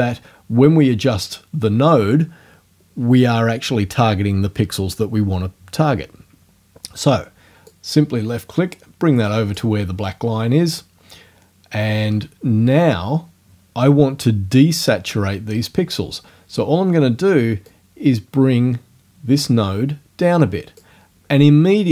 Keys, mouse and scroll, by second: 7.7 click, 17.7-21.0 drag.